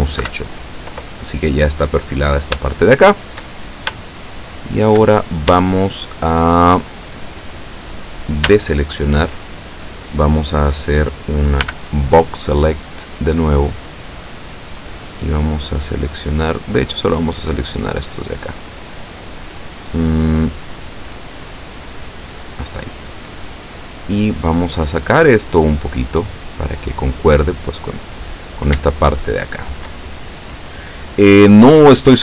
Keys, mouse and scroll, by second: 0.3 KP_7, 2.7 shift+middle click, 3.7 shift+scroll down 1, 4.2 shift+middle click, 5.3 shift+scroll down 1, 5.9 shift+scroll down 1, 5.9-7.0 shift+middle drag, 7.1 shift+scroll up 2, 8.6 a, 9.8 scroll down 2, 11.7 b, 14.0-22.8 drag, 24.2-28.1 drag, 28.9-30.1 shift+middle drag.